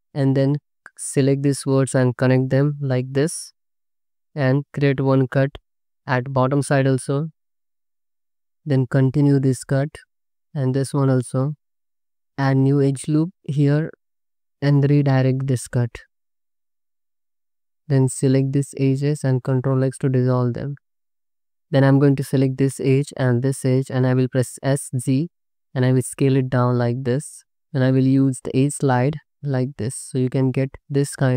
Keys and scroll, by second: 0.1 1, 2.8 j, 7.1 space, 8.5 y, 10.1 space, 11.0 y, 11.3 space, 12.3 ctrl+r, 14.1 space, 14.9 ctrl+r, 16.5-18.0 typing, 19.2 ctrl+x, 20.0 ctrl+x, 20.2 Tab, 20.9 alt+shift+z, 23.9 s, 24.3 z, 29.7 g, 30.7 Tab.